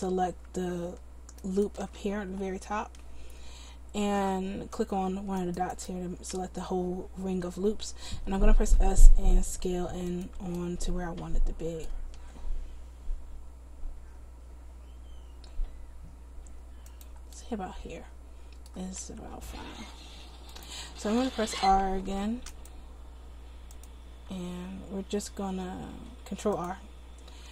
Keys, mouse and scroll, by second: 8.4 s, 12.2 s, 19.1 s, 21.6 ctrl+r, 24.4 s.